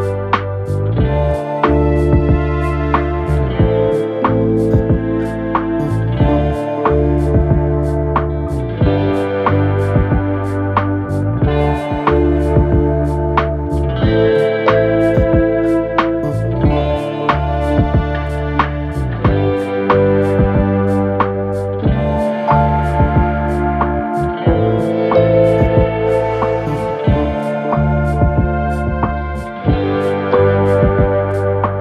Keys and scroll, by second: 5.7 ctrl+z, 16.8 3, 18.2 ctrl+z, 27.7 ctrl+d, 27.9 Escape.